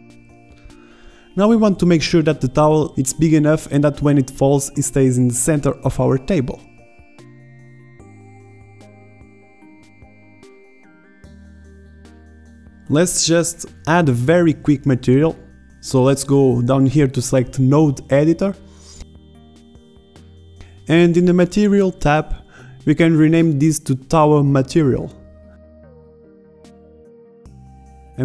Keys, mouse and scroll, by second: 2.7 s, 4.2-4.6 middle drag, 4.6 alt+a, 6.7 middle drag, 7.1 alt+a, 8.2 shift+Left, 9.6 z, 9.6 z, 10.5 Tab, 10.8 w, 10.9 Tab, 11.0 alt+a, 12.2 alt+a, 12.6 shift+Left, 13.0 s, 13.2 alt+a, 14.2 alt+a, 14.3 shift+Left, 15.2 click, 22.0-22.5 drag, 22.5 click, 26.7-27.0 scroll up 1, 27.8 click.